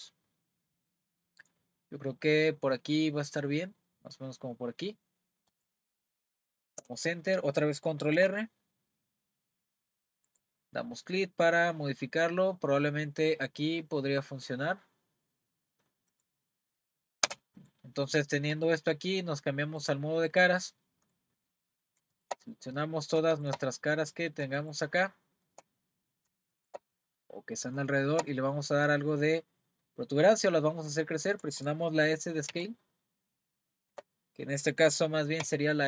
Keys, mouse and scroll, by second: 6.8 Return, 8.1 r, 17.3 Return, 17.6 click, 18.1 middle click, 18.5 click, 19.8 click, 20.3 click, 21.0 click, 22.1 shift+click, 22.5 middle click, 23.3 shift+click, 23.7 middle click, 24.6 shift+click, 25.1-26.5 shift+middle drag, 26.5 shift+click, 27.0-29.6 middle drag, 29.6-30.3 scroll down 2, 30.6-30.9 scroll up 2, 31.0-32.5 shift+middle drag, 32.5 s.